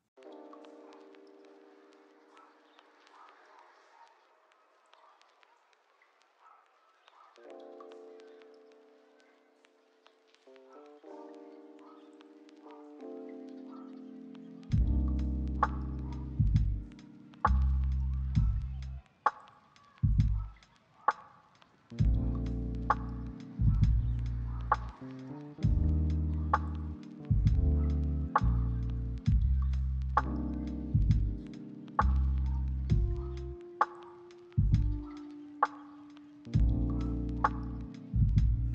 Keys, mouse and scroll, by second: 0.0 middle click, 0.9 scroll down 1, 1.0 middle click, 1.6-2.3 scroll up 2, 1.8 shift+middle click, 2.3 scroll, 2.4 shift+middle click, 3.0 shift+middle click, 3.2-3.7 scroll up 2, 3.4 shift+middle click, 3.7 shift+middle click, 4.0 s, 10.2 middle click, 10.7 shift+middle click, 11.3-11.7 scroll down 1, 12.5 shift+middle click, 13.3 scroll up 1, 13.7 shift+middle click, 13.7 shift+scroll down 1, 14.2 double click, 14.8-16.1 scroll down 1, 16.4 double click, 17.0 scroll down 1, 17.4 double click, 17.6-19.1 scroll down 1, 20.5 middle click, 20.9 right click, 21.4 s, 21.5 s, 21.7 right click, 22.9 middle click, 23.6 double click, 34.3 ctrl+middle click, 34.5 shift+middle click, 35.2 double click, 36.6 ctrl+middle click, 38.3 double click.